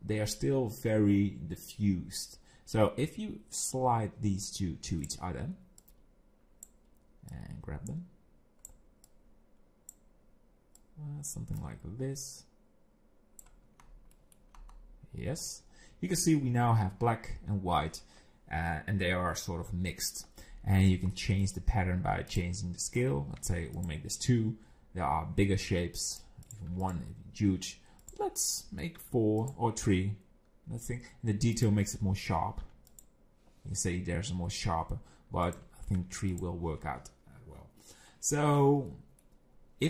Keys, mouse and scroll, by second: 3.7 click, 5.8 click, 7.3 click, 9.1 click, 10.8 click, 11.6 click, 13.8-14.2 scroll up 5, 14.2 middle click, 14.6-16.9 scroll up 5, 20.8 scroll down 6, 21.1 middle click, 22.3 click, 26.1 click, 26.5 click, 28.0 click, 31.6 click, 35.5 click, 38.9 middle click.